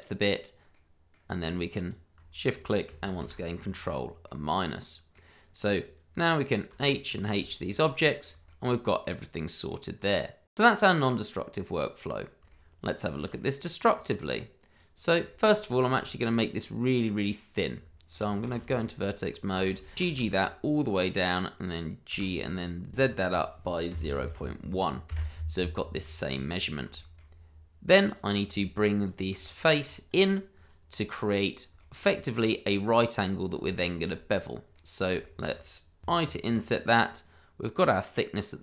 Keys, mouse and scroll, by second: 0.4 scroll down 1, 0.7 middle click, 3.2 ctrl+-, 3.9-4.2 scroll up 1, 4.2 middle click, 6.7 h, 7.0 click, 7.3 h, 7.6 middle click, 8.5 shift+middle click, 9.0 middle click, 10.4 shift+middle click, 10.5 middle click, 10.6 shift+middle click, 10.8-11.2 scroll up 1, 11.2 middle click, 12.5 shift+middle click, 12.5 middle click, 12.6 shift+middle click, 13.5 middle click, 13.9 click, 15.2 shift+middle click, 15.3 middle click, 15.6 scroll up 1, 16.0 shift+middle click, 17.7 Tab, 18.4 shift+z, 18.8 click, 19.5 shift+z, 19.9 g, 20.8 click, 22.1 g, 22.9 z, 23.9 0, 24.3 1, 25.0 Return, 25.9 scroll down 1, 26.2 middle click, 27.1 shift+middle click, 27.5-27.8 scroll up 1, 28.0 click, 28.5 double click, 29.3 Tab, 30.1 click, 30.5-31.7 scroll down 1, 31.7 shift+middle click, 31.8 middle click, 33.7 shift+middle click, 33.8 middle click, 33.9 shift+middle click, 34.3-34.7 scroll up 1, 34.7 middle click, 35.2 shift+middle click, 36.0 i.